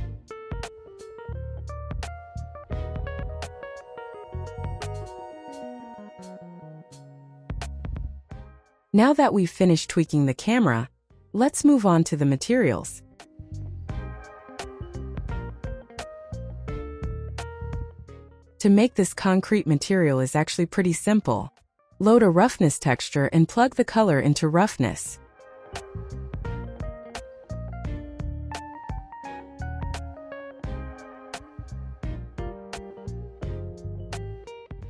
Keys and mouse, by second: 0.9 shift+a, 3.2 s, 4.6 s, 6.0 drag, 7.3 middle click, 11.6 s, 12.7 click, 14.2 click, 14.8-16.3 drag, 17.3 click, 18.0 middle click, 18.6 click, 19.5 ctrl+t, 20.5 click, 27.4 ctrl+click, 28.4 click, 32.3 click, 33.7 click, 34.3 shift+d.